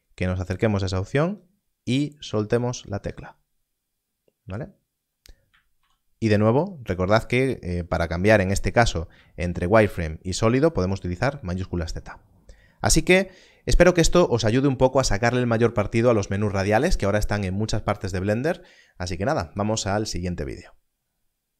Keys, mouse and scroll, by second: 9.3 shift+z, 9.8 shift+z.